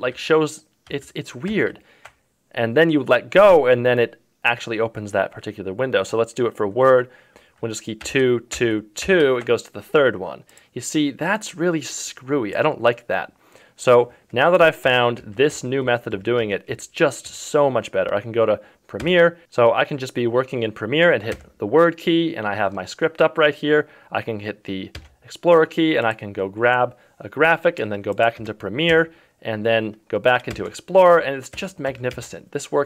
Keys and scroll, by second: 8.0 super+2, 14.8 ctrl+KP_2, 15.2 ctrl+KP_1, 15.5 ctrl+KP_6, 15.8 KP_4, 16.1 ctrl+KP_3, 16.4 ctrl+KP_2, 16.6 ctrl+KP_1, 17.3 ctrl+KP_6, 21.3 ctrl+KP_4, 24.9 ctrl+KP_2, 28.3 ctrl+KP_2, 28.9 ctrl+KP_3, 30.5 ctrl+KP_2, 31.5 ctrl+KP_4, 31.8 ctrl+KP_3, 32.1 ctrl+KP_2.